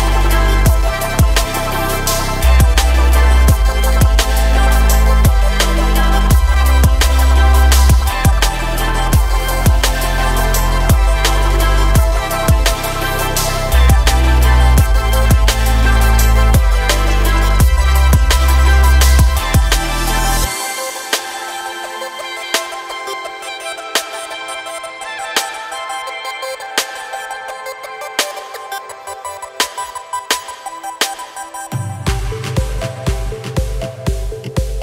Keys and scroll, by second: 0.4 s, 4.0 g, 8.5 s, 18.3 s, 24.8 s, 30.1 s, 32.0 g, 32.3 y.